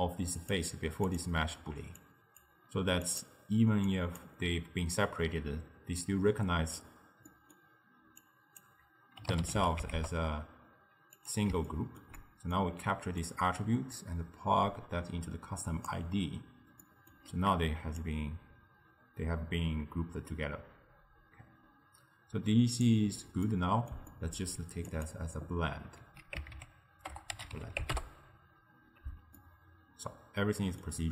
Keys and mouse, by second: 3.1 click, 3.9 click, 7.3-8.3 middle drag, 8.3 click, 11.8-13.3 ctrl+middle drag, 13.3 drag, 16.9-18.0 middle drag, 18.0-21.9 drag, 23.5-25.0 middle drag, 25.0-28.7 drag, 29.4-31.1 ctrl+middle drag.